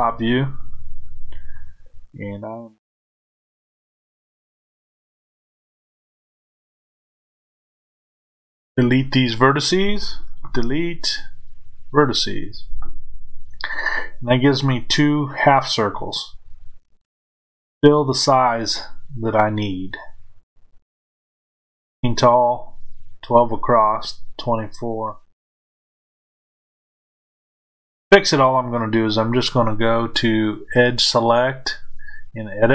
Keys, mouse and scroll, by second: 4.9 click, 17.6-30.7 middle drag, 30.7 click.